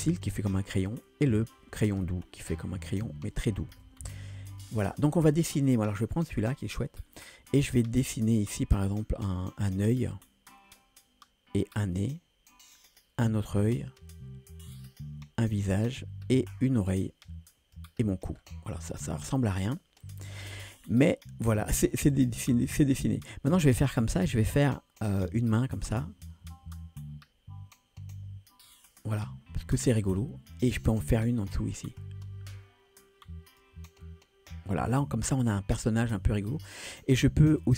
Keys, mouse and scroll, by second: 2.1 click, 3.9 ctrl+z, 4.5-6.7 drag, 8.1 scroll down 1, 8.3 shift+middle click, 10.1-17.8 drag, 18.4 scroll down 2, 19.5-20.8 scroll up 2, 20.8-21.5 scroll up 1, 23.8-28.8 drag, 30.2-31.5 scroll down 2, 31.5-33.7 drag, 34.8-35.7 scroll up 1, 35.7-36.7 scroll up 1, 36.7-37.7 drag.